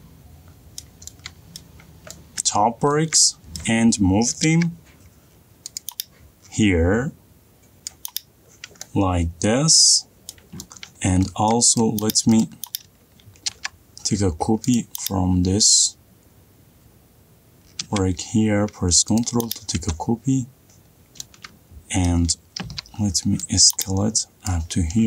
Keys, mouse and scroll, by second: 1.0 middle click, 1.0 middle click, 1.8 middle click, 2.1 middle click, 2.3 shift+middle click, 2.6 middle click, 2.9 middle click, 3.8 middle click, 4.7 m, 6.0 click, 7.8 ctrl+z, 8.2 click, 8.8 middle click, 10.6-11.3 middle click, 11.2 middle click, 11.5 middle click, 11.6 shift+middle click, 11.8 middle click, 12.1 click, 12.8 click, 13.9 m, 15.1 click, 19.5 click, 19.9-20.3 middle click, 19.9 middle click, 21.0 middle click, 21.0-22.4 scroll down 10, 22.4 scroll up 5, 23.0 s, 24.8 click.